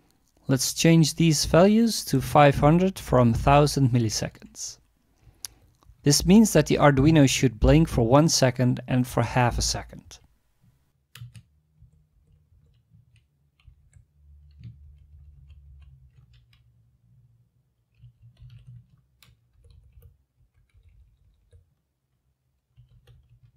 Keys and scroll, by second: 3.7 BackSpace, 4.1 BackSpace, 4.7 5, 5.2 Down, 5.4 Down, 5.8 Right, 6.3 BackSpace, 6.7 BackSpace, 7.1 5, 8.5 Up, 8.6 Up, 9.7 ctrl+Right, 10.0 ctrl+Right, 11.2 space, 11.8 Down, 12.1 Down, 12.5 Left, 12.9 space, 13.6 Up, 13.8 Up, 14.8 ctrl+Right, 15.1 ctrl+Right, 15.3 ctrl+Right, 15.7 ctrl+Right, 17.8-19.0 typing, 19.5 Down, 19.7 Down, 19.9 Down, 20.4 Up, 20.7 Left, 20.9 Left, 21.0-23.5 typing.